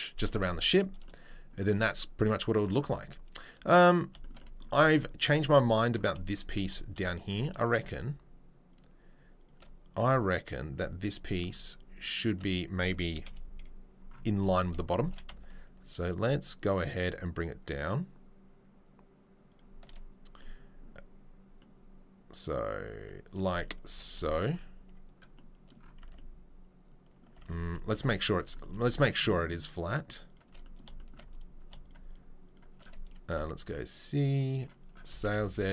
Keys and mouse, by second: 5.5 Tab, 6.6 3, 7.6 click, 7.8-9.9 shift+middle drag, 9.9-12.0 drag, 12.0-31.8 shift+middle drag, 13.2 KP_3, 14.9 g, 23.8 2, 26.0 Tab, 27.3 Tab, 27.9 3, 29.3 shift+click, 29.9 shift+click, 30.2 shift+click, 31.8 shift+right click, 31.9 shift+middle click, 32.0 shift+right click, 32.1 shift+middle click, 32.4 shift+right click, 32.5-35.7 shift+middle drag, 35.1 s.